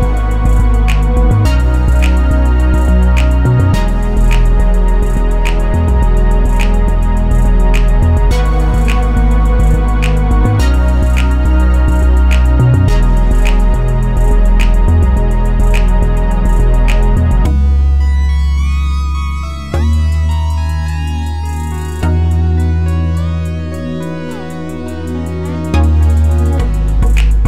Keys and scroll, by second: 4.4 2, 6.0 1, 6.3 Return.